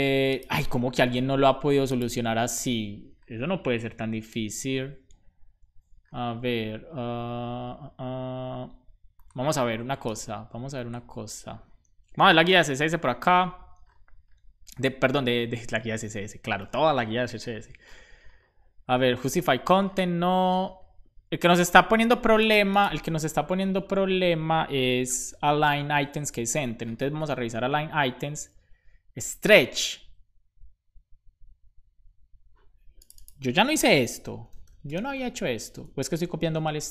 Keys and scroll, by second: 24.9 shift+super+Left, 25.9 super+s, 33.8-35.3 typing, 36.6 super+s.